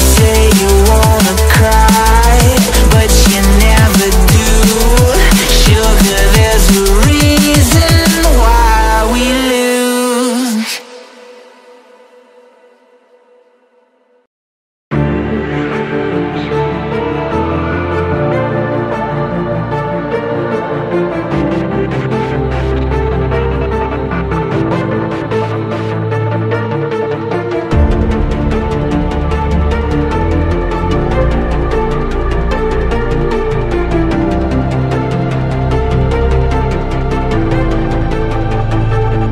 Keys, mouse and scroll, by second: 3.8 alt+scroll down 1, 6.7 alt+scroll down 1, 6.8 alt+scroll up 1, 9.1-13.3 scroll down 1, 13.3-14.4 scroll up 1, 17.6 ctrl+z, 20.0-21.2 typing, 22.1 alt+scroll up 1, 22.7 alt+scroll down 1, 23.0-23.4 alt+scroll up 1, 23.4-24.3 typing, 25.9-26.7 typing, 26.4 scroll up 1, 27.2 shift+click, 27.4-27.9 shift+scroll down 2, 27.9 scroll up 1, 28.5 shift+click, 29.1 ctrl+g, 31.0-31.3 scroll up 1, 31.3 right click, 32.7 ctrl+z, 33.5 alt+scroll down 1, 33.6 alt+scroll up 1, 38.0 ctrl+i, 39.2 ctrl+t.